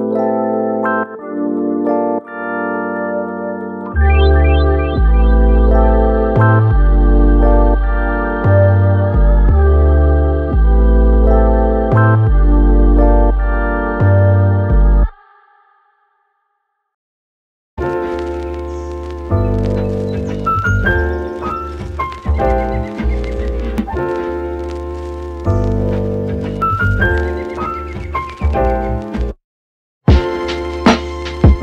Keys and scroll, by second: 4.4 super+z, 11.9 super+z.